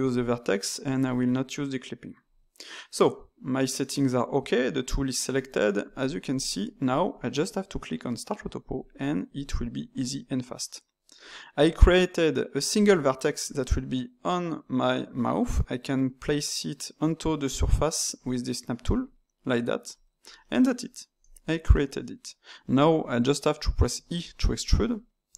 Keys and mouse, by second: 6.5-8.7 ctrl+middle drag, 8.7-11.7 drag, 20.3-23.9 middle drag, 23.9 e.